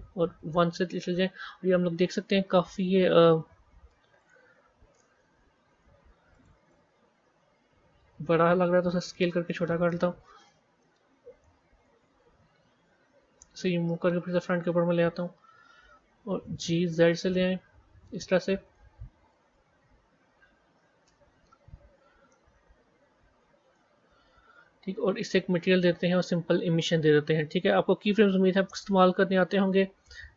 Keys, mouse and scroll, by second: 0.3 KP_1, 1.1 scroll up 2, 2.8 click, 4.1-8.3 drag, 8.3 s, 10.7-12.7 middle drag, 12.7 g, 15.1 KP_3, 16.3 g, 19.3 KP_1, 21.3 scroll down 1, 22.2-23.9 middle drag, 23.9-24.4 scroll up 4, 24.4 scroll down 1, 25.6 click, 26.6-30.3 drag.